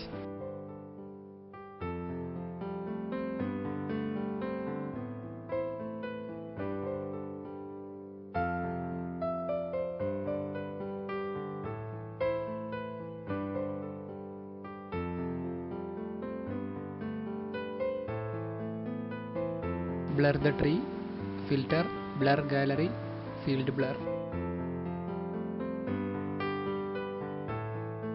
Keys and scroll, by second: 7.3 Return, 8.9 f, 9.1 space, 14.0 ctrl+t, 17.1 Return.